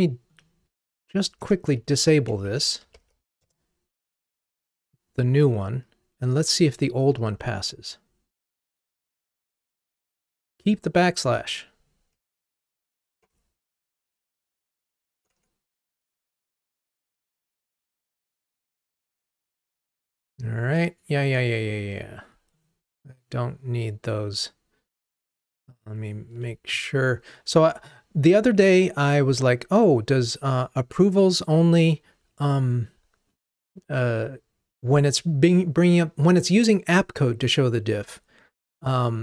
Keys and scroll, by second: 2.6 super+j, 3.4 Return, 7.3 ctrl+r, 13.4 ctrl+Tab.